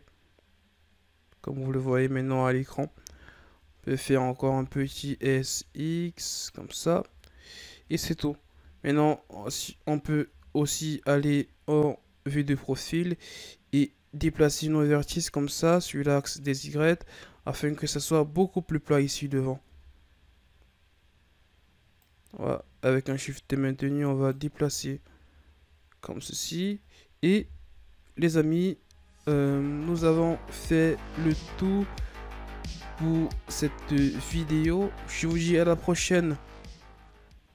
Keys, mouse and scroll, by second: 1.5-2.3 ctrl+scroll up 8, 2.3 Tab, 2.7-4.3 ctrl+scroll down 12, 4.3 s, 7.0 Tab, 7.3 scroll down 3, 8.4 KP_3, 9.3-9.7 ctrl+scroll down 4, 9.7-10.2 scroll up 3, 10.2 Tab, 10.9 ctrl+scroll up 1, 12.5-15.5 drag, 16.6 Tab, 17.2 scroll down 1, 17.6-18.9 shift+scroll up 3, 19.2-19.5 scroll up 1, 19.5 Tab, 21.9-24.6 drag, 24.6 Tab, 25.0-26.0 scroll down 4, 26.4-27.3 scroll down 2, 27.3 KP_1, 28.5-28.9 scroll down 3, 28.9-29.6 shift+scroll up 5, 29.8-30.8 scroll up 3, 30.8-31.2 shift+scroll down 4, 31.6-34.9 ctrl+middle drag.